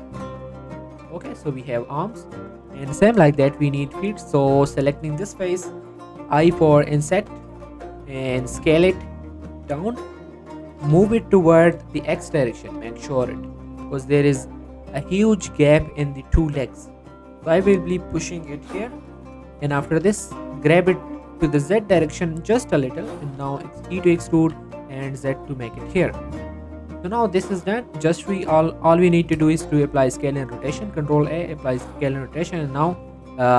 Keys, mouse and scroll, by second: 0.2 Tab, 0.7-1.9 middle drag, 1.9 scroll down 1, 2.1 middle click, 3.1 scroll up 1, 3.4 Tab, 3.7 shift+middle click, 4.3 scroll up 1, 4.5 click, 7.1 click, 8.3 s, 9.2 click, 9.9-10.4 scroll up 1, 10.7 g, 11.0 x, 11.7 click, 11.9 shift+middle click, 12.2 scroll down 1, 12.4 middle click, 12.7 g, 12.9 y, 13.5 x, 14.3 click, 14.9 middle click, 15.8-16.1 scroll down 1, 17.4-18.7 scroll up 1, 19.3 scroll up 1, 19.5 shift+middle click, 19.9 g, 20.3 z, 22.4 click, 22.7 scroll down 1, 22.8 middle click, 23.1 e, 23.5 z, 24.4 z, 25.9 click, 26.1 Tab, 26.3-27.6 scroll down 3, 26.5 middle click, 27.0 middle click, 27.6 middle click, 27.7 scroll down 1, 27.9 shift+middle click, 28.1 scroll up 1, 29.6 ctrl+a, 30.2 click, 31.0 ctrl+a, 31.4 click, 32.8 right click.